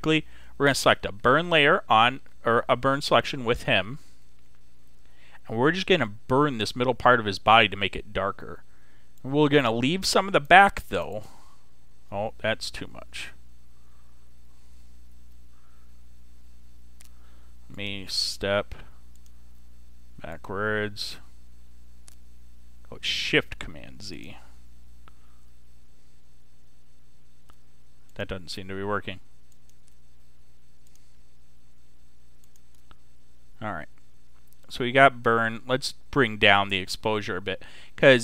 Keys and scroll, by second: 0.9 ], 2.5 ], 4.1 ], 15.8 ctrl+super+z, 25.4 shift+super+z.